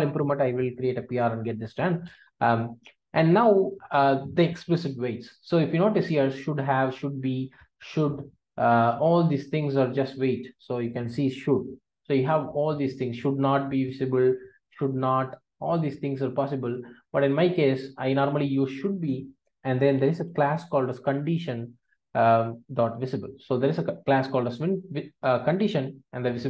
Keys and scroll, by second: 0.3 Return, 22.8 Return.